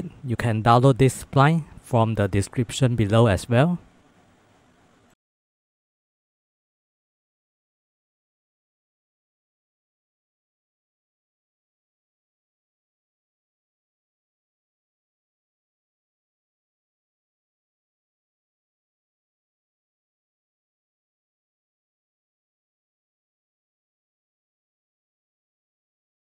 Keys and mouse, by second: 0.0-0.5 typing, 1.4 shift+click, 1.6 click, 1.7 g, 1.9 click, 2.2 g, 2.5 click, 2.8 click, 2.8 g, 2.9 shift+middle click, 3.4 g, 4.5 g, 5.8 shift+middle click, 5.9 shift+middle click, 6.1 shift+middle click, 6.5-26.2 typing, 7.3 shift+click, 7.7 click, 9.2 click, 9.8 shift+click, 10.2 shift+click, 11.8 click, 12.1 shift+click, 13.8 shift+middle click, 14.5 shift+click, 14.8 Tab, 15.0 Tab, 15.2 shift+click, 15.8 shift+middle click, 16.1 shift+middle click, 17.0 shift+click, 17.6 shift+click, 18.0 click, 18.8 shift+middle click, 18.9 shift+middle click, 19.3 ctrl+z, 19.4 shift+middle click, 19.8 shift+middle click, 20.4 shift+middle click, 21.4 shift+middle click, 21.8 shift+middle click, 22.7 Tab, 24.1 shift+click, 24.3 shift+click, 25.6 Tab.